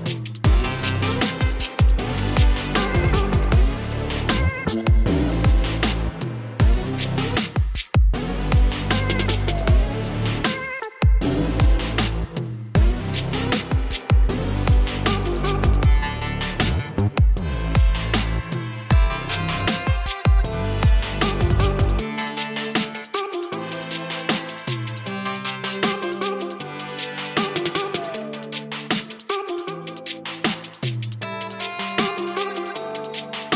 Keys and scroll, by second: 0.4 typing, 1.8 typing, 3.1 [, 5.8 [, 6.8 [, 8.0-9.3 typing, 10.4 ], 10.5 ], 15.3 ], 15.5 ], 19.2 space, 20.2-20.7 typing, 24.0 ctrl+alt+z, 24.1 ctrl+alt+space, 25.2 [, 25.6 [, 26.1 ], 28.2-29.0 typing, 30.4 [.